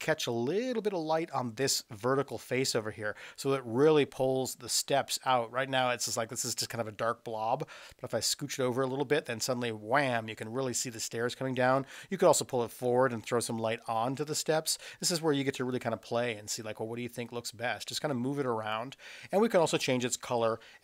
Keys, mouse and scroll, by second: 5.8-10.1 drag, 12.0-18.7 drag.